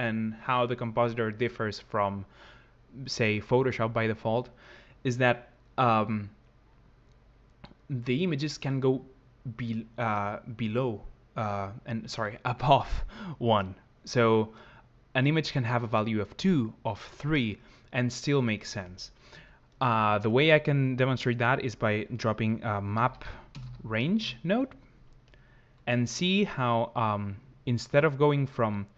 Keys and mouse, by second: 20.8 click.